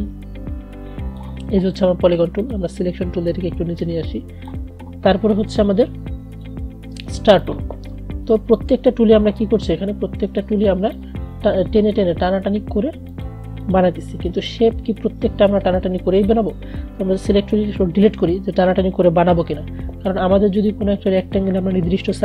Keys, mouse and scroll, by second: 17.9 Delete, 20.8-22.2 drag.